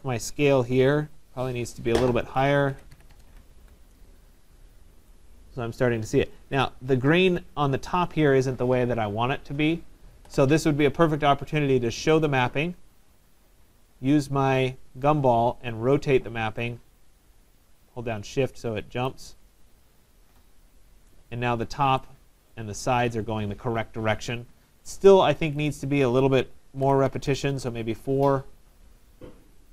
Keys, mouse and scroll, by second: 0.9 click, 2.5-3.6 typing, 4.6 Tab, 6.1 right click, 10.6 right click, 12.3 click, 12.8 middle click, 12.9 middle click, 12.9 middle click, 15.1 click, 18.9 click, 19.1 shift+click, 19.7 middle click, 19.7 middle click, 19.9 middle click, 21.1 right click, 22.6 right click, 25.7 click, 26.8-27.8 typing, 27.8 Tab, 29.2 middle click, 29.2 middle click, 29.3 middle click.